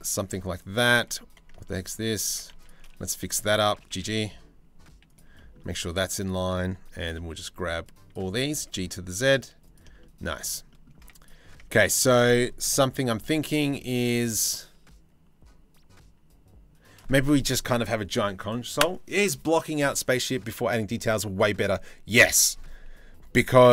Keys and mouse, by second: 0.6 1, 1.3 Tab, 1.4 click, 1.9 Tab, 2.1 1, 2.2 click, 3.4 g, 4.9-6.4 shift+middle drag, 6.8 c, 8.1 g, 9.5-10.5 shift+middle drag, 10.6 z, 10.8 click, 11.4 Tab, 12.4 KP_3, 23.2 Tab, 23.6 g.